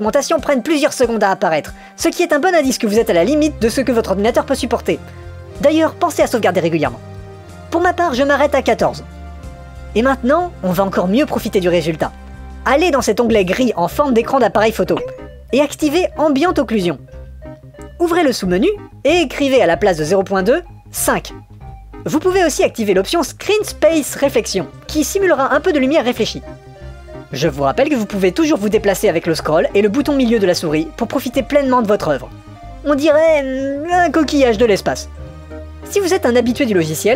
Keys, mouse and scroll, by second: 2.1 click, 3.2 click, 4.4-5.4 drag, 7.0 ctrl+s, 13.9 click, 16.2 click, 17.1 click, 19.3-21.4 drag, 23.0 click, 23.7 click, 29.7-32.8 middle drag, 33.3 middle click, 34.3 click, 35.1-37.1 middle drag, 37.1 middle click.